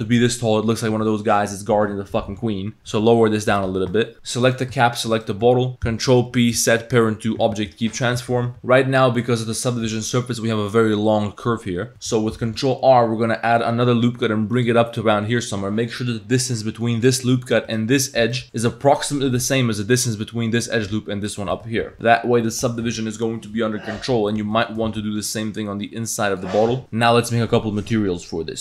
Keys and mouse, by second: 0.0 Tab, 0.0 b, 0.0 z, 1.0 z, 2.4 Tab, 2.8 g, 3.6 z, 3.7 Tab, 3.9 drag, 4.1 ctrl+p, 4.1 a, 4.4 click, 5.2 shift+click, 5.7 ctrl+l, 5.9 ctrl+p, 8.2 a, 8.5 z, 8.5 Tab, 9.0 click, 11.9 Tab, 12.4 ctrl+r, 16.9 click, 17.7 click, 18.3 alt+click, 18.4 click, 21.3 alt+shift+click, 21.8 ctrl+z, 22.1 Tab, 22.1 1, 22.1 g, 24.2 z, 24.4 Tab, 24.5 click, 24.9 ctrl+r, 26.6 click.